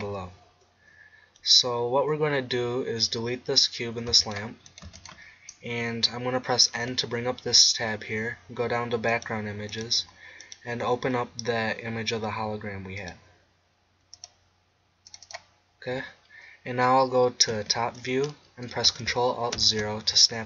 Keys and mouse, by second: 4.1 x, 4.8 x, 6.8 n, 13.0 click, 17.5 KP_7, 19.6 ctrl+alt+KP_0.